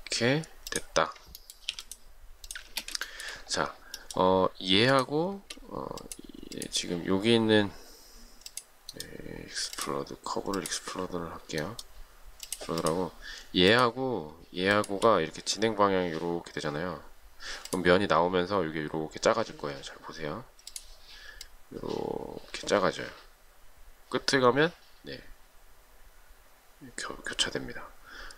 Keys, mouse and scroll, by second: 1.9 p, 2.9 space, 3.3 shift+middle click, 15.0 shift+click.